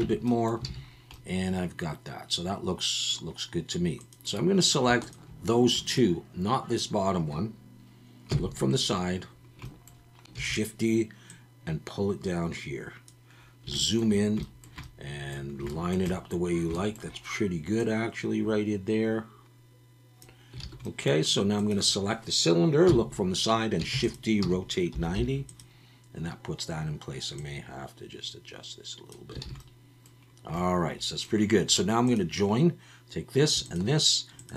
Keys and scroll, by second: 0.0 Tab, 0.7 alt+a, 8.3 KP_3, 10.3 shift+d, 20.6 alt+a, 22.9 KP_3, 23.9 shift+d, 24.4 r, 24.9 9, 25.1 0, 29.4 alt+a.